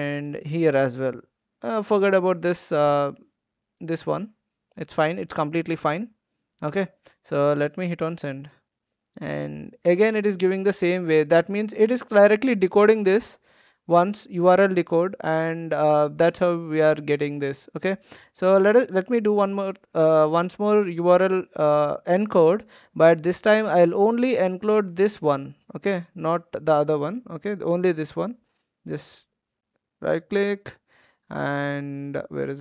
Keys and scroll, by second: 1.4 ctrl+v.